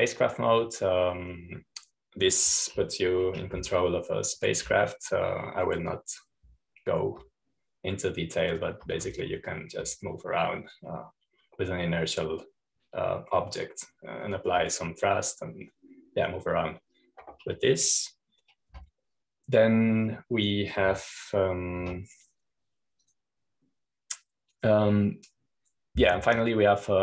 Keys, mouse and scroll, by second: 1.1-3.0 drag, 20.6 2, 22.7 Escape, 23.8 1.